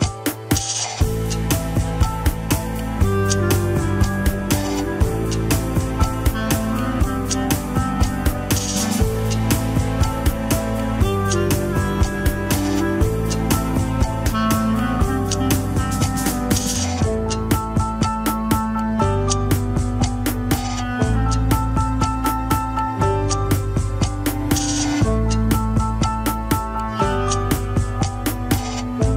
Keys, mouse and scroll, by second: 1.1-1.7 scroll up 4, 1.4 shift+middle drag, 2.0-2.5 drag, 3.1 click, 7.0-8.8 middle drag, 8.8 scroll down 2, 9.1 KP_1, 9.9 a, 10.3 alt+r, 10.6-11.4 scroll up 7, 11.4 drag, 12.0 scroll down 3, 12.4 r, 15.9-16.3 scroll up 7, 16.4 ctrl+Tab, 16.7 shift+click, 17.2 ctrl+Tab, 18.1 alt+z, 19.0 ctrl+click, 19.4-20.8 middle drag, 20.8 ctrl+click, 21.3 scroll down 2, 22.3 ctrl+click, 22.3 alt+z, 22.5 middle click, 23.1 shift+z, 23.3 scroll up 1, 24.1 scroll down 2, 25.1 alt+z, 26.1 ctrl+click, 26.6 scroll up 2, 26.8 shift+z, 27.4 shift+z, 28.0 scroll down 4.